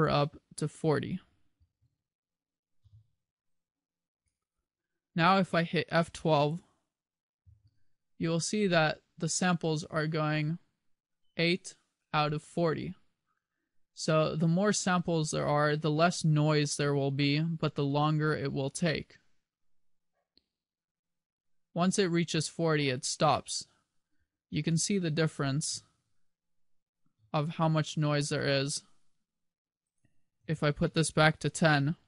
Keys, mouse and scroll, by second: 26.0 1, 27.4 2.